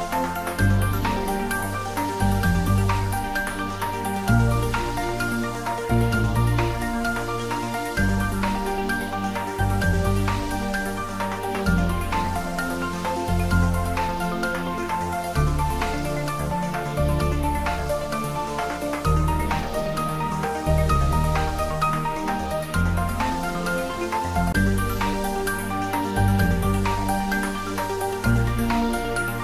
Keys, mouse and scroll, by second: 4.0 click, 7.5-8.9 scroll down 1, 9.8 click, 15.1 click, 19.4 click, 23.0 click.